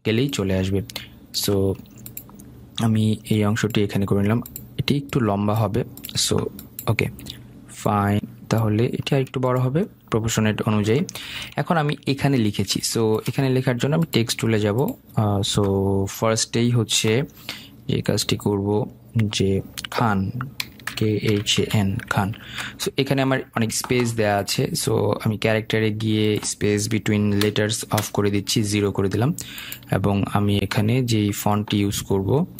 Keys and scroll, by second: 22.9 ctrl+a, 28.4 Return.